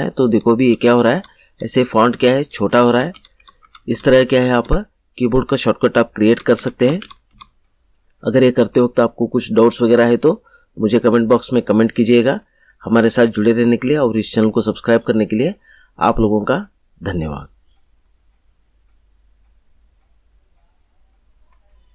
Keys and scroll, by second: 6.2 /.